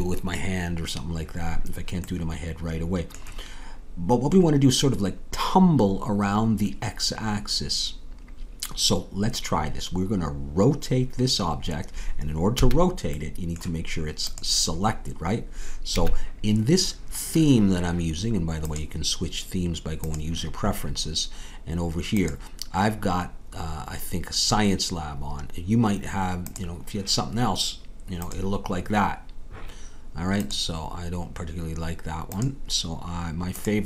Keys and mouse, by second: 2.6-5.6 middle drag, 12.5 a, 14.8-16.3 drag, 16.0 a, 19.2-21.6 drag.